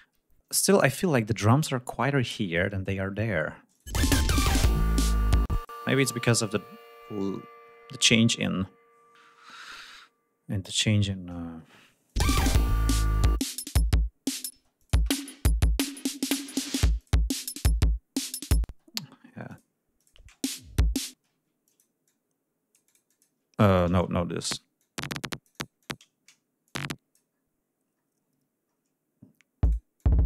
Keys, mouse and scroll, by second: 0.4 scroll down 2, 3.8 click, 4.0 space, 4.2 ctrl+scroll up 2, 5.5 space, 5.6 click, 6.4 click, 12.1 click, 12.3 space, 13.1 click, 13.4 click, 14.5 ctrl+space, 14.8 ctrl+click, 17.0 click, 18.7 space, 19.5 click, 20.0 click, 20.2 space, 20.6 ctrl+scroll up 2, 21.2 ctrl+space, 21.4 e, 21.7 click, 22.1-23.4 drag, 23.9 ctrl+y, 24.5 click, 24.8-26.2 drag, 26.7-27.4 shift+drag, 27.4-28.2 scroll down 3, 28.6-29.1 scroll down 2, 29.6 click, 29.9-30.2 drag.